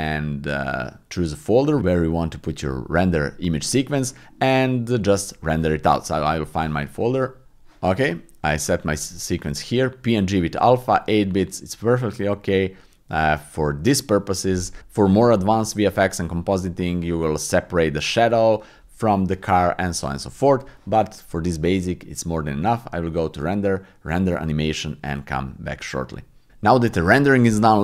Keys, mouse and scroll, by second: 22.5-26.3 drag.